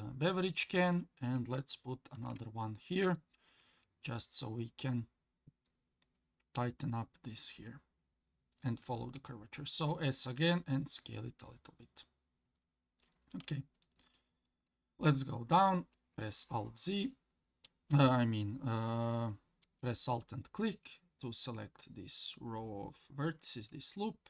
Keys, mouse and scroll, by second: 2.1 ctrl+r, 9.1 s, 13.0 scroll down 1, 13.5 shift+middle click, 14.1 shift+middle click, 15.9 alt+click, 17.1 scroll up 1.